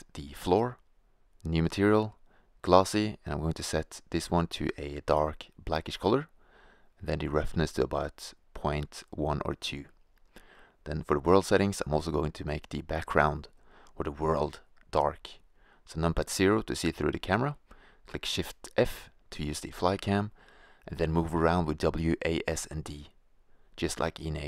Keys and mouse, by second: 0.1-0.6 drag, 1.7-2.1 drag, 3.1-4.1 drag, 6.1-7.2 drag, 7.6-9.7 middle drag, 9.7-11.1 drag, 14.7 shift+z, 15.1 KP_0, 17.9 shift+f, 24.1 click, 24.2 shift+z.